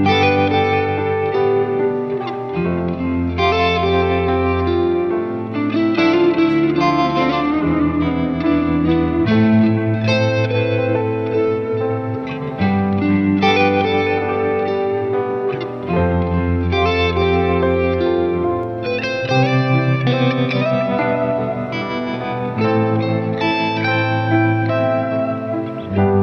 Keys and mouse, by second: 0.2 ctrl+z, 0.4 ctrl+z, 0.6 ctrl+z, 0.8 ctrl+z, 2.1 ctrl+z, 2.6 ctrl+z, 2.8 ctrl+z, 3.2 ctrl+z, 3.5 ctrl+z, 3.7 ctrl+z, 4.2 ctrl+z, 5.2 ctrl+z, 5.4 ctrl+z, 6.4 ctrl+z, 7.1 ctrl+z, 7.3 ctrl+z, 7.7 ctrl+z, 7.8 ctrl+z, 8.1 ctrl+z, 8.5 ctrl+z, 8.7 ctrl+z, 9.0 ctrl+z, 9.9 ctrl+z, 10.3 ctrl+z, 10.7 right click, 10.9 ctrl+z, 11.4 ctrl+z, 14.6 ctrl+z, 15.6 right click, 19.3 ctrl+z, 19.6 ctrl+z, 19.7 ctrl+z, 20.9 ctrl+z, 21.5 ctrl+z, 23.9 ctrl+z.